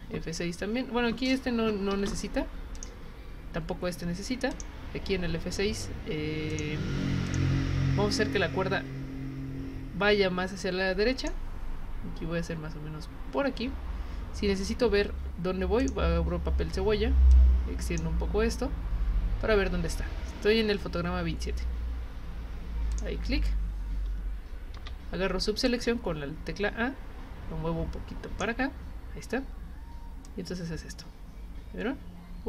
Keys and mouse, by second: 2.8 click, 4.5 click, 6.5 click, 7.2 click, 11.2 click, 15.8 click, 17.3 click, 22.9 click, 25.7-28.4 drag, 30.3-32.4 drag.